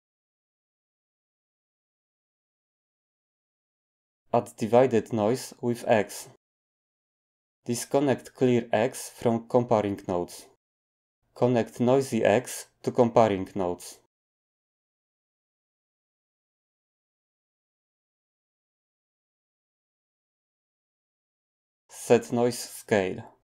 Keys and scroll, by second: 18.3 g, 23.4-23.5 typing.